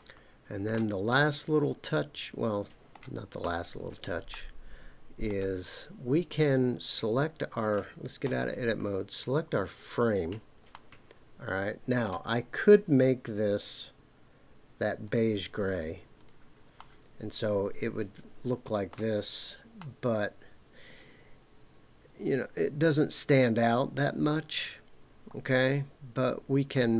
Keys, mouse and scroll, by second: 1.1-3.0 middle drag, 4.3-5.3 middle drag, 6.9 click, 8.2 Tab, 9.6 click, 10.7-12.1 middle drag, 13.5-15.2 drag, 16.1 click, 16.8-18.9 middle drag, 19.2 scroll down 2, 19.8-26.8 middle drag.